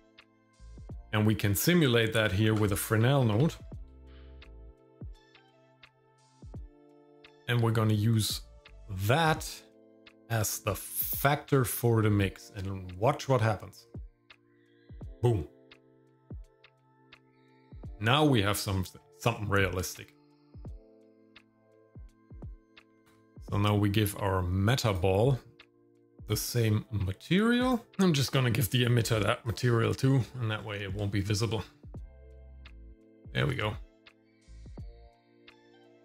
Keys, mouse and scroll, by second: 2.4 shift+a, 3.8 s, 9.6-14.5 drag, 16.7-17.0 scroll up 1, 17.1 shift+middle click, 18.3 shift+middle click, 21.7-23.1 drag, 22.9 KP_3, 23.3 shift+middle click, 23.3 scroll down 1, 24.9 click, 26.2-27.7 drag, 28.7 click, 30.6 scroll up 2, 31.0 shift+middle click, 31.6 scroll up 2, 32.6-33.0 scroll down 3, 33.3 shift+middle click, 35.2 click.